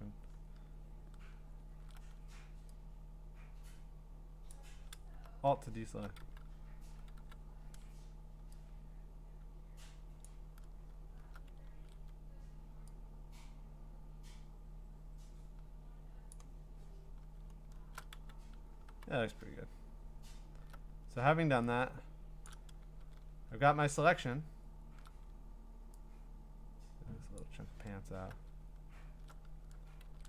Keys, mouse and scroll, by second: 0.1 scroll down 4, 1.5-1.9 scroll up 3, 4.5 alt+click, 5.5 scroll down 3, 6.2-7.1 typing, 6.2 middle click, 10.2 alt+click, 11.7 ctrl+z, 16.3 alt+click, 17.4-18.1 scroll, 18.1 q, 18.8 q, 19.4 scroll, 20.1 scroll, 22.5 shift+click, 23.3-24.0 scroll, 24.6-25.2 scroll, 27.4 alt+click, 28.4-30.0 scroll, 30.0 ctrl+z.